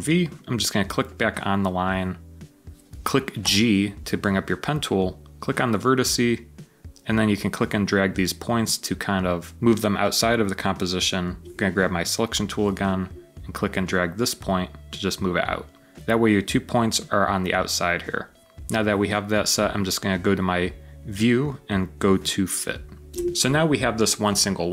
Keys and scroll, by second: 3.3 g.